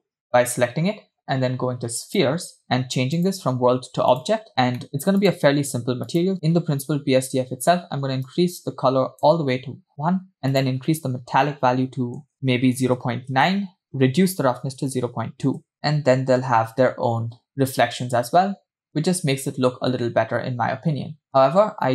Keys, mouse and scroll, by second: 2.1 click, 3.2-4.2 drag, 4.8 middle click, 5.2 click, 6.1 click, 6.6 click, 10.8-13.7 drag, 13.8-16.1 drag, 16.1 scroll down 2, 16.1 space, 17.7 space, 18.9 scroll down 1, 18.9 space, 21.3 space.